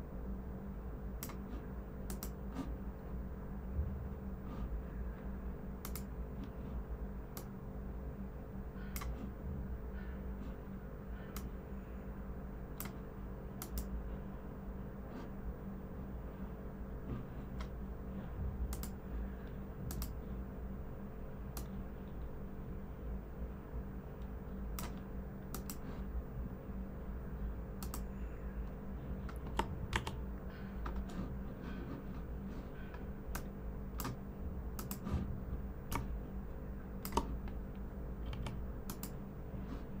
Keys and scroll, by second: 29.9 super+-, 38.2 i.